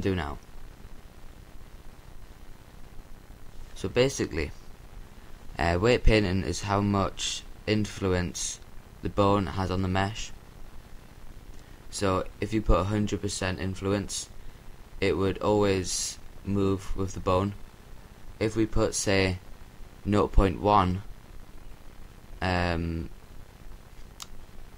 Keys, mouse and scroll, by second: 7.2-8.8 right drag, 8.8-10.5 drag, 12.8-14.5 right drag, 14.9-20.1 drag, 22.7-24.0 drag, 24.0 ctrl+z.